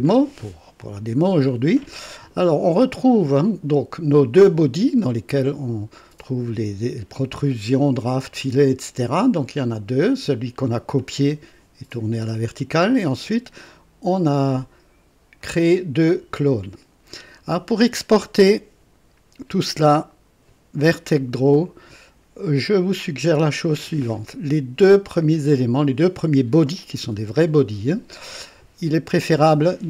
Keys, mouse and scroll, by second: 3.2 click, 8.4 click, 9.6 click, 11.9 click, 13.1 click, 14.4 click, 15.4 click, 16.3 click, 24.8 click.